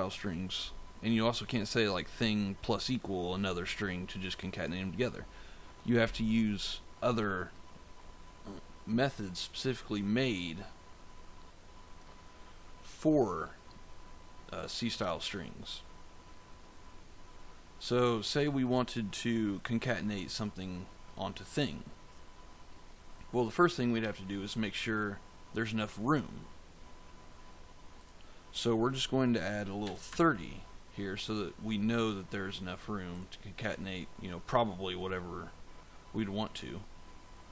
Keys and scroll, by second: 29.7 3.